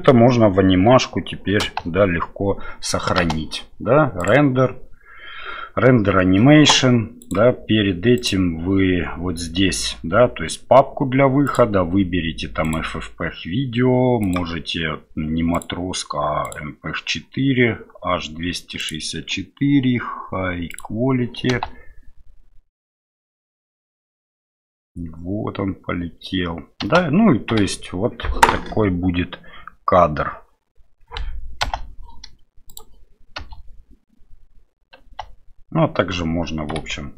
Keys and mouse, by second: 1.7 space, 4.3-6.4 drag, 7.2 click, 11.4-12.8 drag, 14.2 click, 15.7 click, 19.0-20.8 drag, 21.5 space, 26.8 space, 33.4 space.